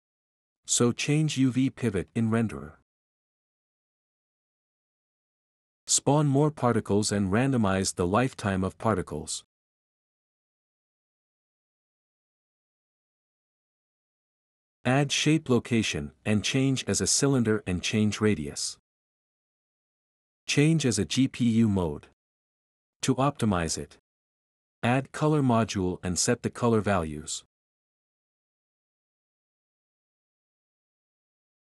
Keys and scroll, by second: 1.8-2.8 typing, 9.3-10.1 typing, 14.9 typing, 18.8-20.3 typing, 25.5-26.9 typing, 28.3-30.9 typing, 28.8 Tab, 29.0 Return.